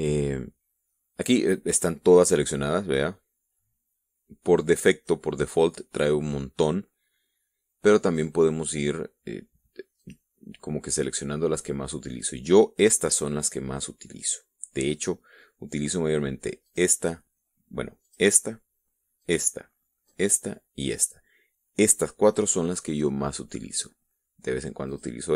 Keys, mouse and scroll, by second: 2.7-5.6 drag, 8.4 click, 10.4 click, 17.0 click, 18.4 click, 19.6 click, 20.4 click, 21.2 click, 25.2 click.